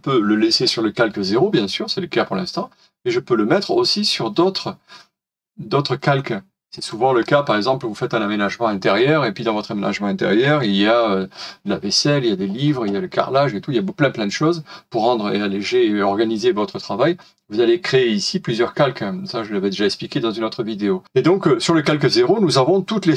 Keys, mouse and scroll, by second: 7.2-7.7 scroll down 1, 8.7 scroll down 1, 8.7-9.1 scroll up 1, 10.4 middle click.